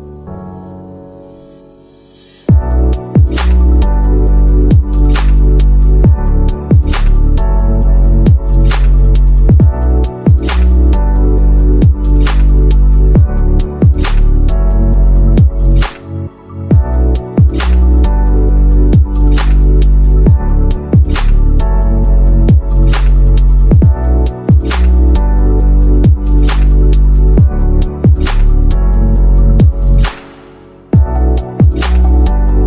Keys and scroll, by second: 0.0 ctrl+z, 5.1 shift+F2, 5.6 Escape, 11.3 ctrl+g, 14.3 ctrl+g, 26.4 ctrl+z, 27.7 ctrl+z.